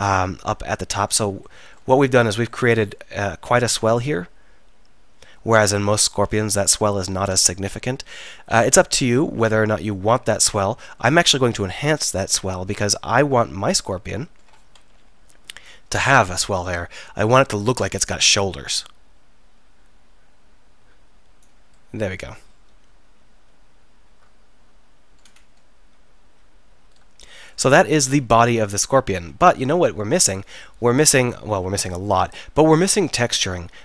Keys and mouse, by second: 8.3-8.7 middle drag, 9.4 middle click, 10.6-11.0 middle drag, 11.4-12.6 middle drag, 12.6-15.0 middle drag, 15.0 KP_3, 21.8-23.1 middle drag, 26.4 z, 26.8 z, 32.2-33.8 middle drag.